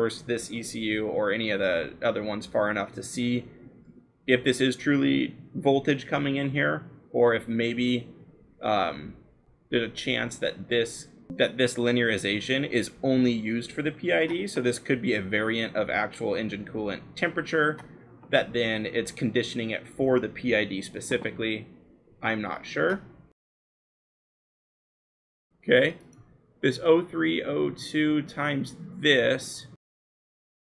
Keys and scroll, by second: 0.0-0.3 typing, 20.7 l, 23.4 shift+t, 30.2-30.6 scroll.